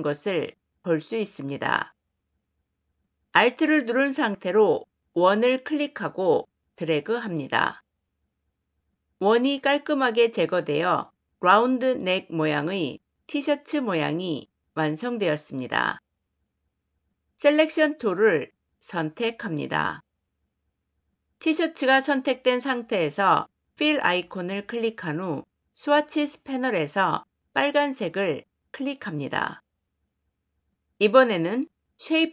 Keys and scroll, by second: 17.7 v.